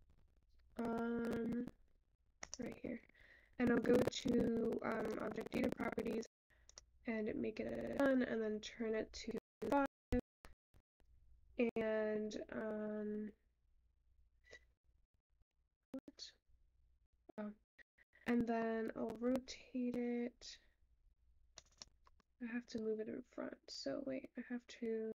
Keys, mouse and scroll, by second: 6.3 click.